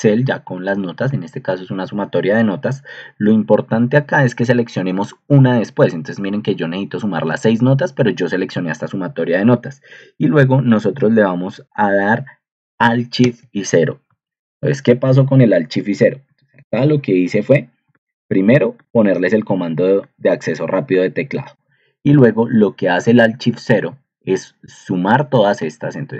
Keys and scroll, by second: 0.3 shift+Right, 0.5 shift+Right, 0.7 shift+Right, 0.9 shift+Right, 1.1 shift+Right, 1.3 shift+Right, 13.2 alt+shift+0, 14.1 ctrl+2.